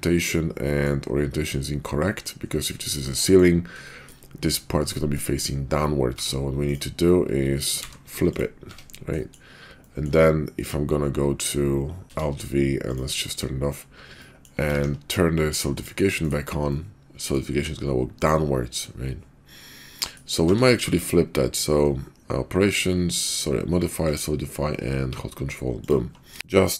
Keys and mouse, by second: 0.2-0.9 middle drag, 2.1 middle drag, 3.0-3.4 middle drag, 3.8 shift+middle drag, 5.0 middle drag, 6.1 Tab, 6.6 click, 7.8 alt+n, 8.6 Tab, 9.1 drag, 9.8 click, 9.9 middle click, 12.0 alt+n, 12.0 alt+v, 14.2 middle click, 14.7 ctrl+`, 16.7-17.3 middle drag, 18.1-18.8 middle drag, 19.9 middle drag, 20.4 q.